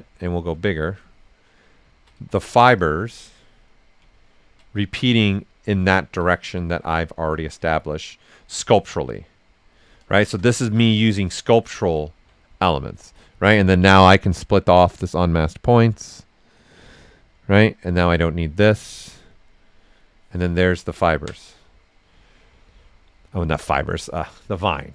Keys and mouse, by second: 1.5 right click, 2.1 s, 2.2 click, 3.7 right click, 4.8 right click, 6.2 ctrl+right click, 7.6 right click, 9.1 click, 9.8 right click, 10.2 shift+f, 10.5 ctrl+right click, 16.9 click, 17.7 click, 20.5 ctrl+right click, 21.3 right click.